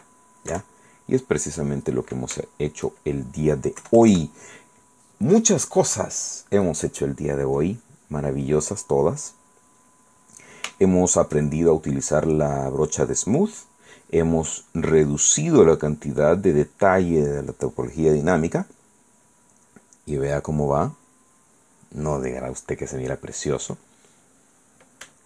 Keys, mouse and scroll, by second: 2.6 shift+click, 4.0 KP_Add, 7.8-9.7 drag, 9.8 click, 11.0 shift+click, 11.0 shift+middle click, 19.6-24.3 middle drag.